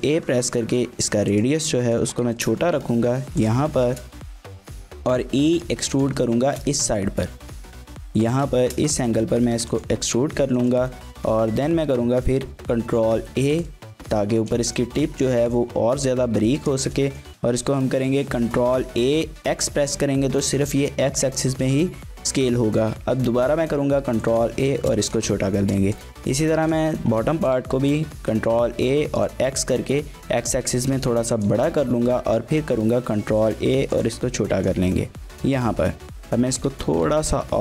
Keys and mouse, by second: 1.3 click, 1.8 shift+click, 2.3 shift+click, 2.7 g, 3.4 click, 3.8 shift+click, 4.5 e, 5.9 click, 6.5 shift+click, 6.5 middle click, 6.8 g, 8.1 click, 8.6 shift+click, 8.9 g, 9.7 click, 10.6 shift+click, 10.9 middle click, 11.5 shift+middle click, 11.7 middle click, 12.0 ctrl+a, 13.5 click, 14.4 shift+middle click, 14.6 middle click, 15.2 shift+middle click, 15.4 middle click, 16.1 ctrl+a, 16.6 click, 16.8 shift+click, 17.1 click, 17.9 shift+click, 18.1 click, 18.4 ctrl+a, 18.9 x, 22.3 click, 22.7 ctrl+a, 24.3 click, 24.6 shift+middle click, 25.0 middle click, 25.4 shift+middle click, 25.6 shift+middle click, 26.0 click, 26.6 shift+middle click, 26.8 middle click, 27.4 shift+click, 27.5 middle click, 27.8 ctrl+a, 28.7 x, 31.3 click, 31.9 ctrl+a, 33.9 click, 34.2 middle click, 35.3 KP_3, 36.4 shift+middle click, 36.8 ctrl+a.